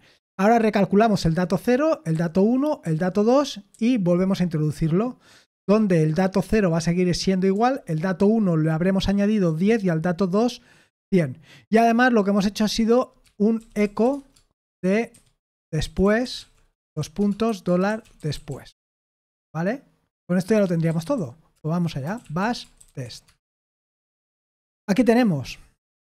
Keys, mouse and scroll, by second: 2.1-3.7 typing, 6.5 j, 12.9-19.4 typing, 20.5-23.5 typing, 23.5 Return.